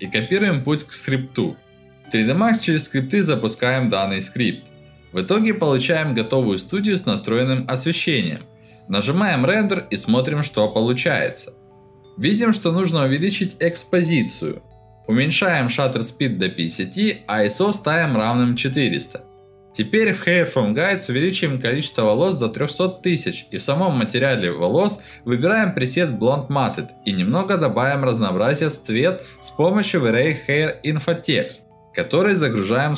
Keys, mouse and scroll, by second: 0.0 click, 0.2 click, 1.0 click, 2.1 click, 2.6 middle click, 2.8-3.4 scroll down 2, 3.4 scroll up 1, 3.5 middle click, 5.0 F9, 5.9-6.2 scroll up 1, 6.7-7.9 scroll up 3, 8.0 middle click, 8.8-9.1 scroll up 1, 9.8-10.1 scroll up 2, 10.4 middle click, 11.1-11.4 scroll down 2, 11.9-12.4 scroll up 2, 12.7 middle click, 13.2-13.6 scroll up 1, 14.6 middle click, 15.0 click, 17.0 click, 18.8 ctrl+alt+middle click, 19.5 alt+middle click, 20.4 click, 22.2 0, 22.3 Return, 23.4 click, 27.3 click, 27.8-29.1 drag, 29.3 middle click, 30.7-32.0 drag, 32.8-32.9 drag.